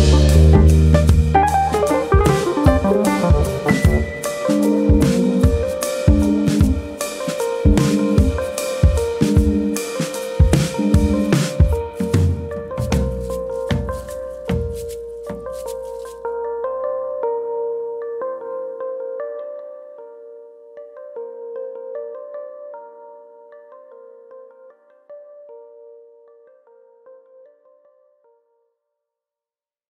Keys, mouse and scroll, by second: 0.1 middle click, 1.0 middle click, 2.2 1, 2.5 click, 2.7 middle click, 3.2 shift+click, 4.4 m, 5.8 middle click, 6.5 click, 6.8 shift+click, 7.8 m, 8.8 middle click, 9.7-10.3 scroll up 2, 10.0 middle click, 10.5 click, 10.9 shift+click, 11.7 m, 12.3 middle click, 12.7 scroll up 1, 13.0 click, 13.2 middle click, 14.1 click, 14.5 middle click, 18.3 shift+click, 19.2 shift+click, 20.7 shift+click, 20.7 m, 21.8 middle click, 22.2 scroll down 2, 22.5 middle click, 23.2 click, 23.6 middle click, 24.3 middle click, 24.9 middle click, 25.1 click, 25.8 click, 27.0 click, 27.7 click, 28.4-29.4 scroll down 3, 28.8 middle click, 29.4 shift+middle click, 29.7 middle click.